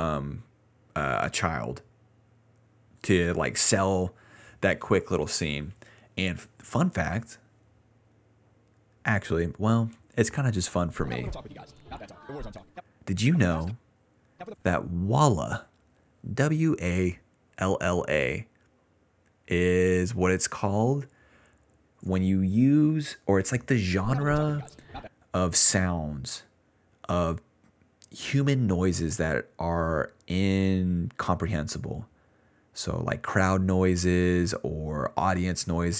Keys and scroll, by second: 2.1-2.9 typing, 10.7 ctrl+s, 10.9 space, 11.7 d, 12.7-16.1 typing, 24.0 space, 25.0 space, 28.9-30.1 typing, 30.9 Return.